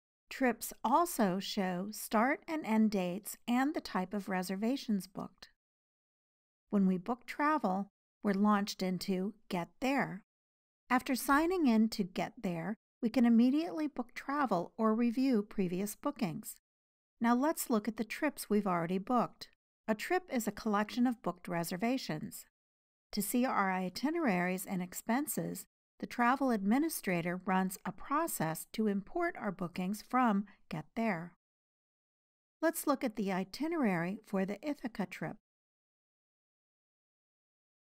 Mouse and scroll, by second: 6.6-10.9 drag, 11.8 click, 16.6-37.7 drag.